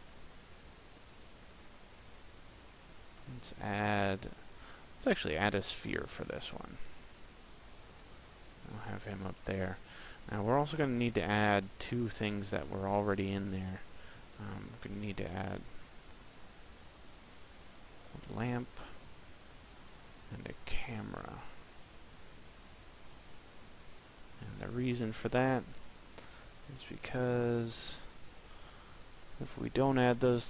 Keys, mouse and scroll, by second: 1.8 click, 2.9 shift+a, 6.5 click, 9.0 shift+a, 13.5 click, 15.6 click, 17.0 click, 18.5 shift+a, 20.8 click, 23.1 click, 24.8 click.